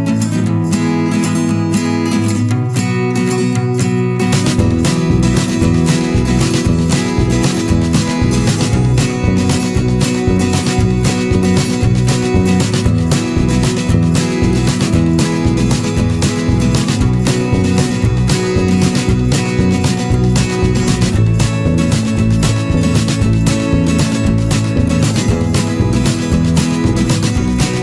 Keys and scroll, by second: 8.9 Return, 19.6 ctrl+z.